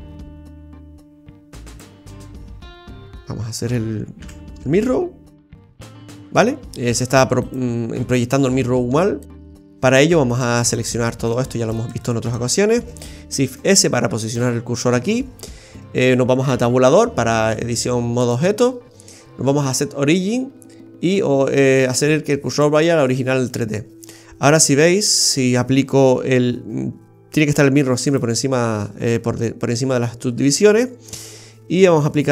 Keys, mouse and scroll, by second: 4.2 KP_1, 5.3 click, 5.6 click, 6.4 middle click, 7.4 right click, 9.2 click, 10.3 right click, 10.5 right click, 11.3 right click, 11.8 alt+shift+right click, 12.0 alt+shift+right click, 13.5 shift+s, 15.5 scroll down 2, 16.4 Tab, 18.2 click, 24.7 scroll down 2, 25.0 middle click, 28.1 click, 31.3-32.3 scroll up 2.